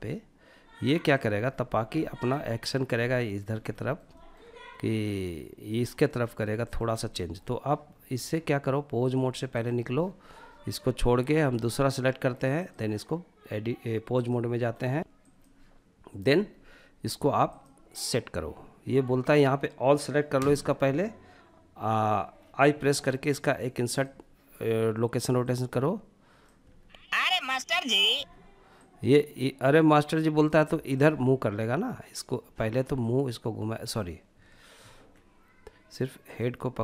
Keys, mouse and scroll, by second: 0.0-0.7 drag, 0.7-1.2 scroll down 3, 1.1-1.5 shift+middle drag, 1.5-2.0 middle drag, 2.1 scroll up 2, 2.4 shift+middle drag, 2.8 scroll up 1, 3.0-3.6 shift+middle drag, 5.0-6.1 middle drag, 6.2 shift+middle drag, 8.2 click, 10.6-14.6 drag, 16.7-19.6 drag, 19.6 a, 22.2 i, 24.7-25.8 drag, 25.8 space, 27.4 space, 28.1-30.4 drag, 32.2-33.6 drag, 34.1 ctrl+z, 35.5-36.8 drag.